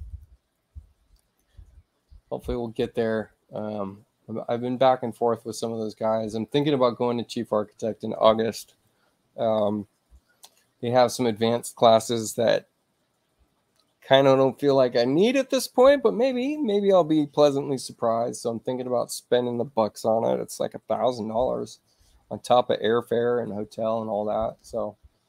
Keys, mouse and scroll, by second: 0.1 click, 1.3 click, 2.1 space, 2.7 click, 6.5 click, 11.6-17.9 drag.